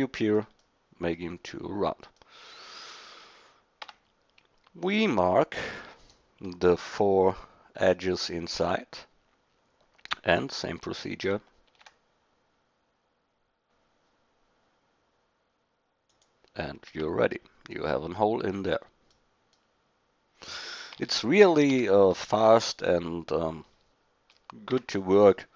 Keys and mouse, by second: 1.2-2.4 middle drag, 2.6 middle click, 3.8 Tab, 8.6 middle click, 11.7 ctrl+b, 16.9 Tab, 21.0 Tab, 21.7 a, 22.4 middle click, 24.7 Tab.